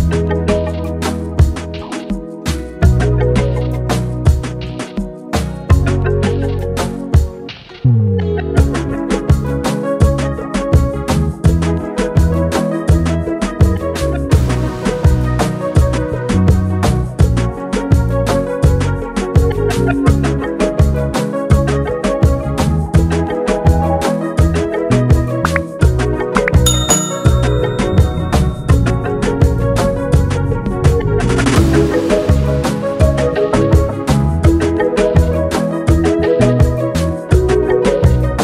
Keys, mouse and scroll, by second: 5.4 click, 8.1 ctrl+j, 9.1 click, 11.8 click, 15.1 click, 19.3-21.0 typing, 23.2 click, 24.2 7, 26.6 click, 28.4-29.8 typing, 32.4 click, 34.2 click.